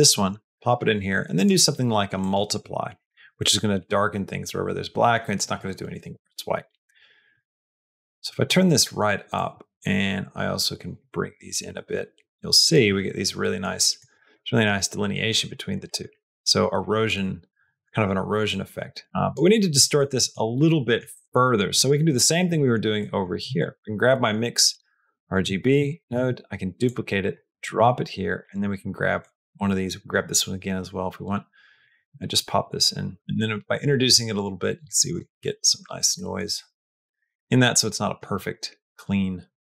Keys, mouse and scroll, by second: 1.2-3.5 drag, 7.2-8.3 drag, 9.2-10.9 drag, 11.4-12.6 drag, 12.8 middle click, 13.2 middle click, 13.6 middle click, 14.0 middle click, 14.3 middle click, 15.0 middle click, 15.3 middle click, 15.7 middle click, 15.9 middle click, 17.0 click, 18.3 click, 19.7 middle click, 20.0 middle click, 20.4 middle click, 21.0 middle click, 22.4 middle click, 22.9 middle click, 23.5 click, 24.1 middle click, 24.6 click, 25.7 click, 26.0 shift+d, 27.2 middle click, 28.3 middle click, 30.0 click, 30.8-31.9 drag, 33.2-34.9 drag, 35.2 middle click, 35.6 middle click, 36.0 middle click, 36.4 middle click, 36.8 middle click, 37.2 middle click, 37.5 middle click, 37.8 click, 38.2 middle click, 39.5 middle click.